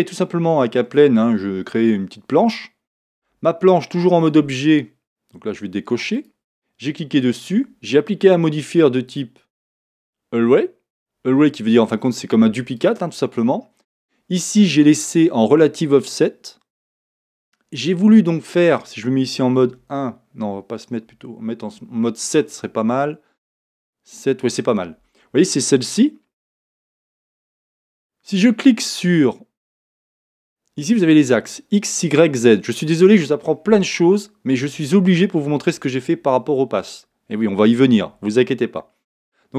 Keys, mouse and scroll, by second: 3.2 Tab, 6.2 click, 9.1-12.9 drag, 19.7 KP_1, 21.1 KP_7, 23.5-27.5 scroll down 1.